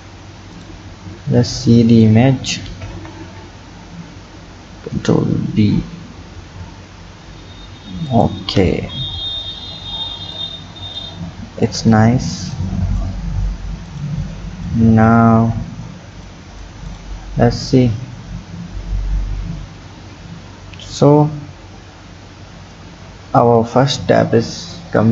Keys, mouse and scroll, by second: 0.6 click, 1.6-2.8 drag, 2.8 ctrl+z, 4.9 ctrl+b, 8.5-10.4 scroll down 8, 10.4 click, 11.2-11.9 scroll down 8, 12.5 click, 13.9 click, 14.7 click, 15.4 Tab, 16.3 click, 16.9 click, 17.7 click.